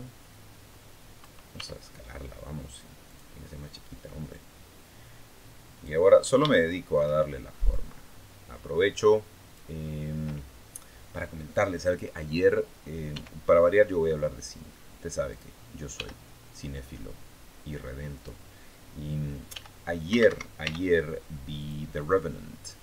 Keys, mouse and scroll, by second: 1.3 s, 2.8 click, 4.1-5.8 drag, 5.9-6.2 scroll up 1, 6.3 shift+middle click, 7.5-9.5 drag, 12.9 r, 15.1 click, 15.8 g, 18.0 click, 19.3 g, 19.9 Escape, 20.4 r, 21.4 click.